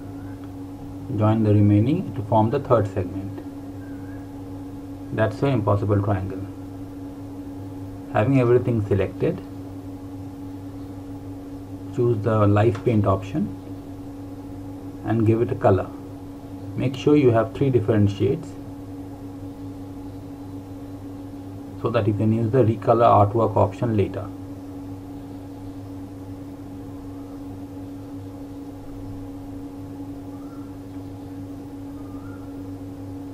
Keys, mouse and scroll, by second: 0.5 click, 7.5 click, 12.8 click, 18.1 click, 22.3 click.